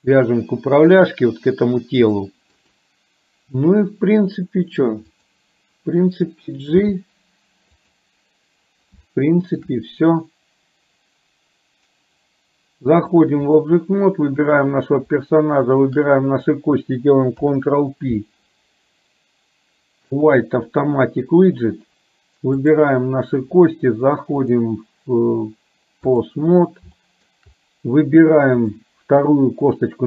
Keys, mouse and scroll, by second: 1.2 click, 2.3 shift+middle click, 6.8 g, 9.2 shift+middle click, 13.2 click, 14.5 click, 15.7 shift+click, 17.4 ctrl+p, 22.7 click, 24.5-26.4 drag, 27.0 shift+middle click, 28.7 click.